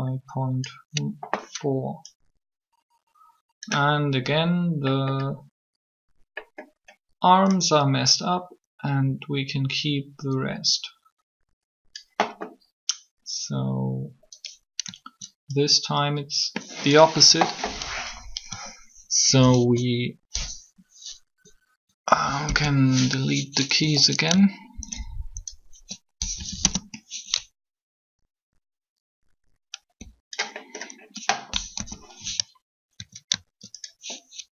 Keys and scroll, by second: 22.1 Delete, 22.4 Return, 26.1 shift+Delete, 26.4 Return, 31.6 3.